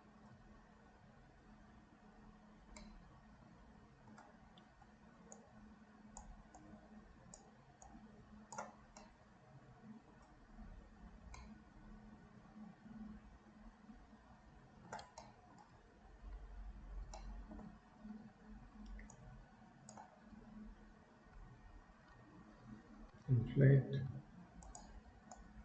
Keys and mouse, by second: 2.9-4.1 middle drag, 5.5 click, 6.7 click, 8.0 click, 9.1-10.2 middle drag, 11.4-15.0 middle drag, 15.2 shift+middle click, 17.2 shift+middle click, 19.2 click, 25.4-25.6 drag.